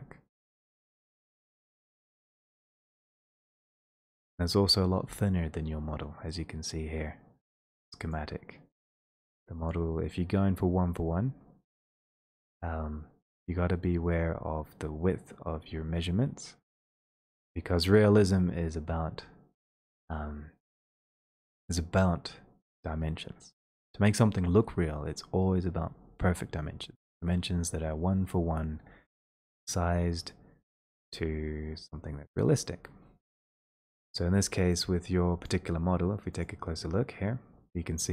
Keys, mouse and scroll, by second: 0.2-3.2 scroll down 8, 3.3 click, 3.5 middle click, 7.3 click, 35.5 click.